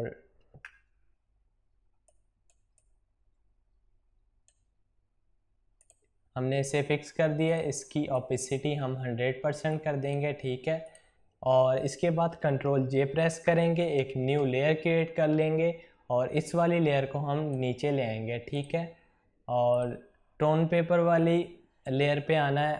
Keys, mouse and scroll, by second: 1.9-10.7 drag, 13.4 ctrl+j, 16.3-18.4 drag.